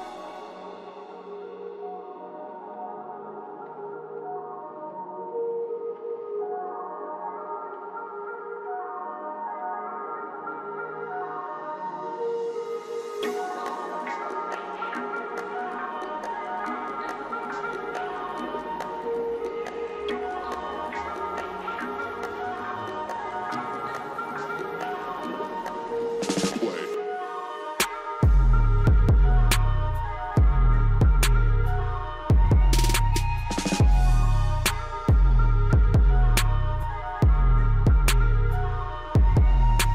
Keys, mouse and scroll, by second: 0.7 alt+click, 1.4 scroll up 1, 2.9-4.9 drag, 4.9 right click, 5.5 scroll down 1, 7.5-9.0 drag, 9.0-9.5 scroll down 1, 10.2-13.3 drag, 13.3 ctrl+right click, 14.4 click, 14.8-15.8 scroll up 1, 16.5-18.9 alt+drag, 18.9 ctrl+right click, 19.7-20.2 scroll down 1, 21.1-26.2 drag, 26.2 ctrl+right click, 29.3 ctrl+r, 32.4-39.5 drag, 39.5 ctrl+right click.